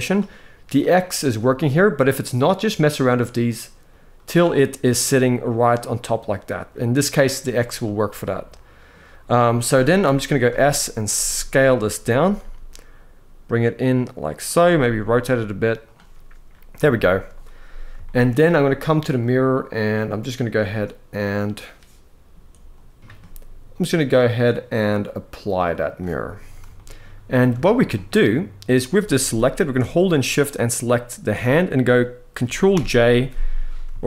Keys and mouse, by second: 2.4 click, 2.8 click, 3.5 click, 3.8 click, 4.8 click, 7.5-8.6 middle drag, 9.7 KP_1, 10.8 s, 11.8 click, 11.9 g, 14.4 r, 16.6 shift+middle drag, 17.7 shift+middle drag, 18.9-21.5 drag, 24.4-25.7 drag, 26.4 shift+middle drag, 27.3 shift+middle drag, 28.9 g, 30.2 shift+click, 32.4 ctrl+j, 33.7-34.0 shift+middle drag.